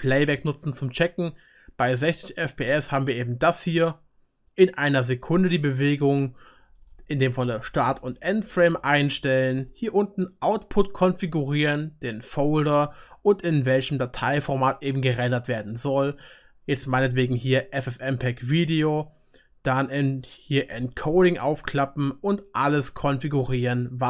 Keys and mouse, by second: 3.2 click, 3.2 middle click, 3.2 right click, 10.2-24.0 drag, 10.2-24.0 middle drag, 10.2-24.0 right drag.